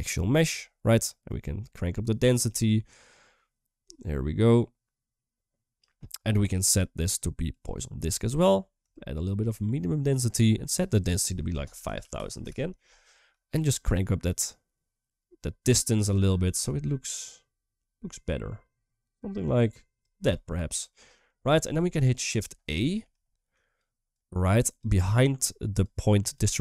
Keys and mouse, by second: 0.2 middle click, 1.2-5.6 drag, 6.3-7.4 drag, 8.7-10.2 shift+drag, 10.4-12.3 drag, 12.3 0, 13.5-19.8 shift+drag, 20.3-21.0 middle drag, 21.6 KP_1, 22.7 middle click, 23.3 click, 23.9 click, 24.1 click, 25.1 click, 25.6 click, 26.5 middle click.